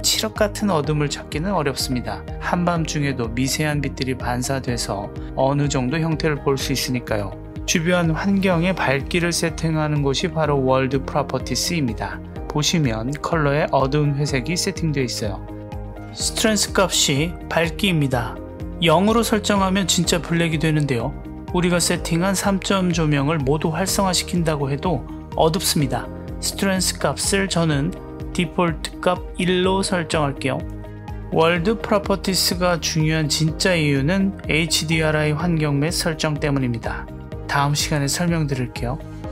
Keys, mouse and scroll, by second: 7.5 click, 12.8 click, 17.4 click, 18.6-19.7 drag, 23.9 click, 24.4 click, 25.0 click, 27.9-29.7 drag, 31.4 click, 31.7 click, 32.0 click, 32.7-37.6 drag, 37.7 drag, 37.9 click, 38.6 click.